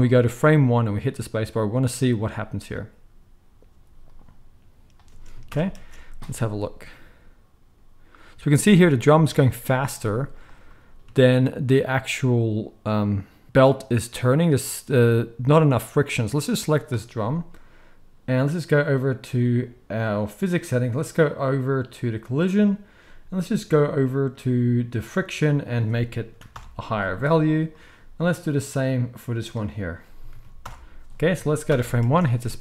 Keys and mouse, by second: 3.7 z, 5.1 space, 5.5 shift+Left, 5.7 space, 6.1 space, 9.7 space, 10.0 z, 16.4 click, 16.5-18.7 middle drag, 18.7 click, 18.8-25.0 middle drag, 25.0-27.6 drag, 27.6-29.5 middle drag, 29.5-32.6 drag, 31.7 shift+Left, 32.0 space.